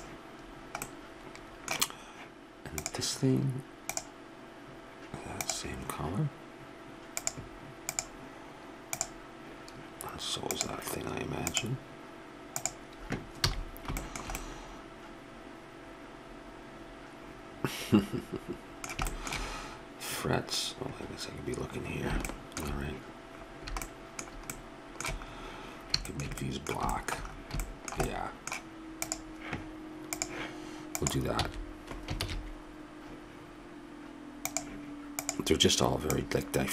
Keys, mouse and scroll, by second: 0.9-2.8 middle drag, 2.8-4.0 drag, 7.2-9.7 drag, 10.5-13.2 drag, 13.4 a, 19.9-26.2 middle drag, 29.0-30.2 right drag, 30.2-32.2 drag, 31.3 x, 32.2 shift+a, 36.2-36.7 drag.